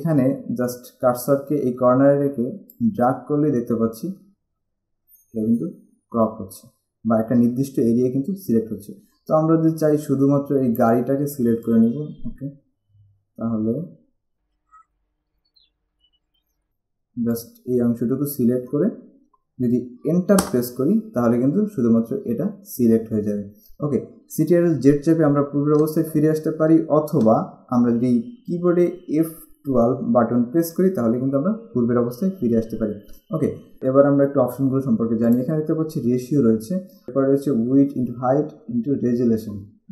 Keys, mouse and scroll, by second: 2.8 click, 15.6 click, 16.4 click, 20.5 Return, 25.7 ctrl+z, 27.1 ctrl+shift+z, 30.7 F12, 35.5 click.